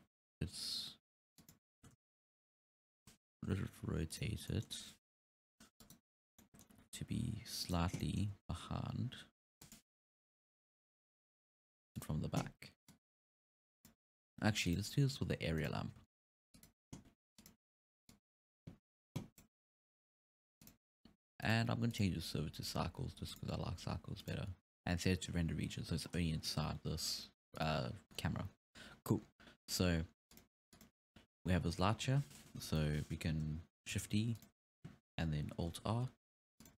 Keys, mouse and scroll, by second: 0.4 r, 2.0 ctrl+z, 2.8 KP_7, 3.6 t, 4.1 right click, 4.5 scroll down 1, 4.5-5.3 middle drag, 5.3 KP_3, 5.8 right click, 6.4 scroll up 2, 6.4-6.9 middle drag, 6.8 r, 8.0-8.4 middle drag, 8.4 r, 10.1 KP_3, 10.9 r, 12.9-14.8 drag, 15.3 g, 15.8 s, 17.3 s, 18.1-20.0 drag, 20.0 s, 21.5 click, 21.9-23.7 drag, 24.2 click, 26.1-27.6 scroll down 3, 27.6 click, 28.1-28.9 scroll up 4, 28.9-29.2 scroll up 1, 29.2-30.0 scroll down 4, 30.3 click, 31.6-32.0 scroll down 3, 32.0-32.4 scroll up 2, 32.7 KP_3, 34.0 shift+d, 35.7 alt+r, 36.4 r.